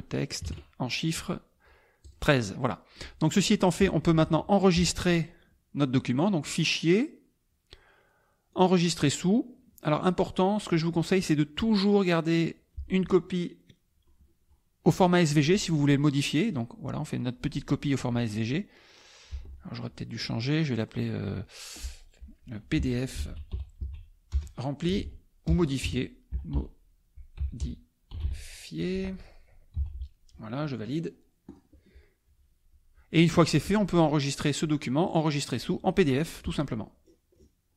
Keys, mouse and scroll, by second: 0.4 KP_1, 0.4 KP_3, 2.0 click, 2.6-4.1 drag, 4.1 KP_Subtract, 6.5 click, 8.6 click, 16.4 click, 19.3 Escape, 22.5-28.1 typing, 27.6 Up, 28.2 Up, 31.4 click, 34.3 click, 35.0 click, 36.4 click, 37.0 scroll down 2.